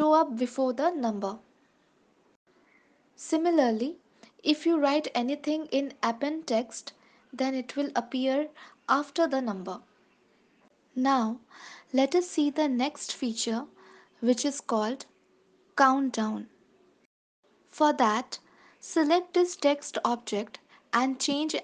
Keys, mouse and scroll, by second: 3.9 click, 9.2 ctrl+s, 10.0 shift+middle click, 12.5 click, 14.0 space, 16.3 space, 16.6 ctrl+s, 18.0 click.